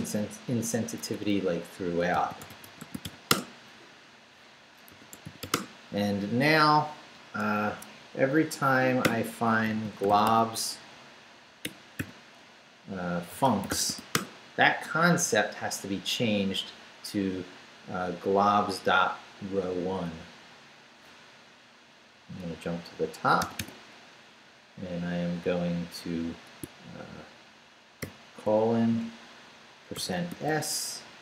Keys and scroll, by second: 0.8 Return, 1.9-3.5 typing, 4.7-5.9 typing, 7.7 Escape, 9.0-12.0 typing, 13.1-14.4 typing, 23.4 g, 28.0 shift+;, 29.9-31.2 typing.